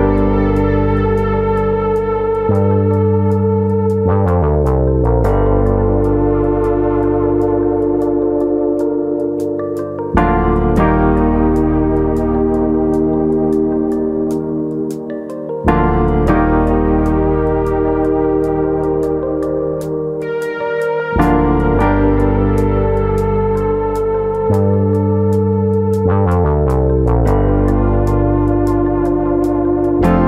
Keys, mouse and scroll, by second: 2.2 click, 2.6 click, 3.5 scroll down 1, 3.7 middle click, 5.6 middle click, 7.1 click, 8.1 middle click, 8.8 click, 9.7 click, 10.7 middle click, 10.9-12.1 scroll down 5, 11.1 middle click, 13.9 middle click, 14.6 middle click, 16.6 middle click, 16.6 click, 17.0 middle click, 17.7 middle click, 18.3 middle click, 18.3-19.1 scroll down 2, 19.1 middle click, 20.8 middle click, 22.0 middle click, 23.6 ctrl+click, 23.8 middle click, 24.4 ctrl+z, 24.7 ctrl+click, 25.6 ctrl+click, 26.4 g, 27.1 click, 27.8 click, 28.9 middle click, 29.3 middle click, 29.3 ctrl+click, 30.2 ctrl+click.